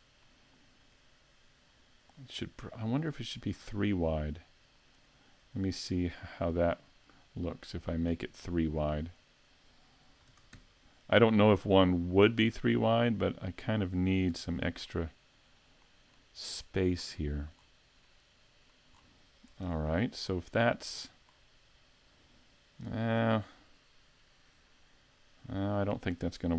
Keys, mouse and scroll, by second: 0.3 middle click, 1.3-2.2 scroll down 2, 2.2 middle click, 5.0 right click, 6.1 shift+right click, 6.9 click, 9.2 right click, 10.3 shift+d, 13.6 click, 14.3 a, 14.5 middle click, 16.6 shift+middle click, 17.1-17.6 scroll up 3, 17.6 scroll down 3, 18.2 middle click, 19.0-19.6 scroll down 2, 19.6 shift+c, 20.3 scroll down 2, 20.7 middle click, 25.9 right click.